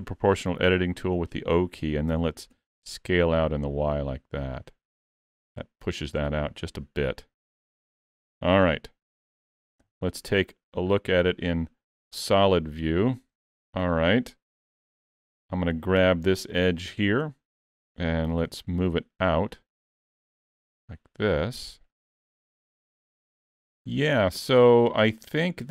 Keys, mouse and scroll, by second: 2.1 s, 8.3 Tab, 9.8 z, 10.9 scroll down 3, 11.2 middle click, 12.9 middle click, 13.8 alt+z, 14.9 Tab, 15.1 2, 16.6 alt+click, 17.1 middle click, 18.5 alt+z, 19.5 click, 22.1 middle click, 25.6-25.7 scroll up 2.